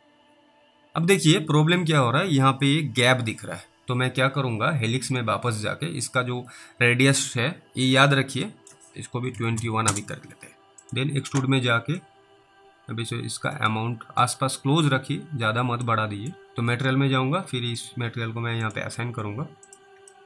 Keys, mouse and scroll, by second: 5.1 click, 8.8 click, 9.4 click, 9.9 Return, 10.9 click, 16.1 middle click, 16.4 middle click, 16.4 scroll down 1, 16.6 m, 17.8 click.